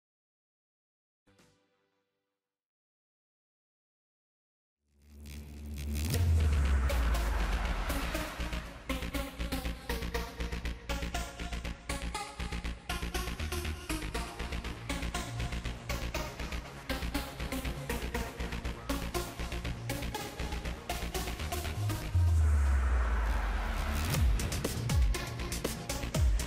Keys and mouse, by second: 0.6 ctrl+z, 1.5 KP_1, 2.8 click, 4.8-7.5 right drag, 7.5-8.8 middle drag, 8.8-9.8 drag, 9.8 right click, 10.3-16.6 middle drag, 18.0 KP_3, 19.1 KP_1, 20.0-21.1 drag, 22.6 middle click, 23.0 ctrl+s, 23.0 click.